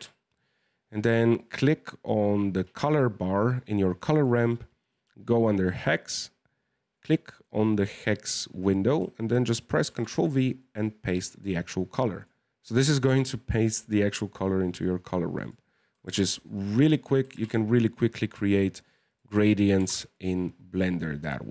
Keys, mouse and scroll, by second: 2.6 click, 4.1 click, 11.6-12.0 scroll up 1, 12.0-14.9 middle drag, 15.3 click, 17.3-18.5 drag.